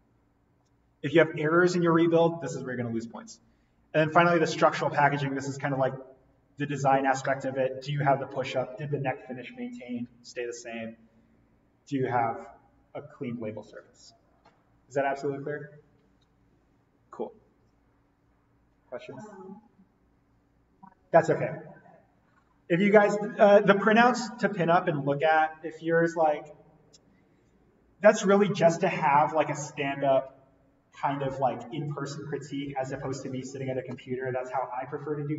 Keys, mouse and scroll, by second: 3.9-5.9 scroll down 1, 5.9 scroll up 1, 24.4-26.8 scroll down 1.